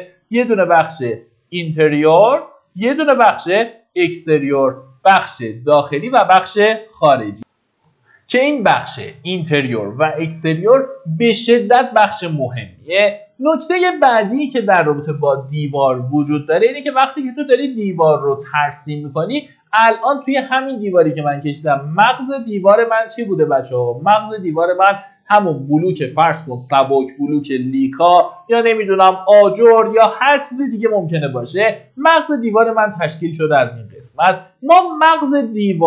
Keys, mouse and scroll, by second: 7.7 F9, 21.6-35.8 drag.